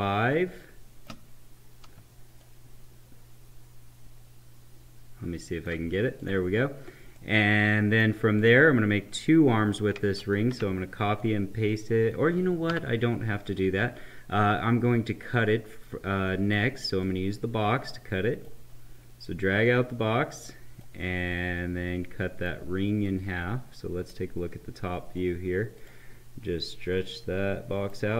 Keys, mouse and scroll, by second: 2.3-6.1 shift+drag, 7.1 right click, 8.3 click, 10.0 ctrl+c, 10.3 ctrl+v, 11.1-12.6 drag, 12.6 Delete, 15.2-22.9 drag, 22.9-24.4 right drag, 24.4-25.8 middle drag, 25.8-28.1 drag.